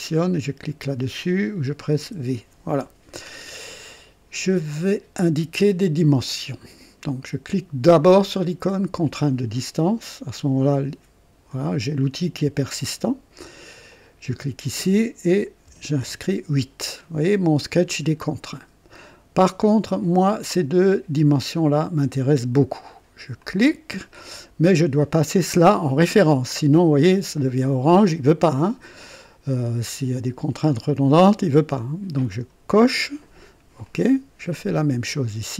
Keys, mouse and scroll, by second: 2.0 v, 9.0 click, 13.9 click, 15.6 KP_8, 16.0 KP_Enter, 23.4 click, 32.3 click, 33.8 click.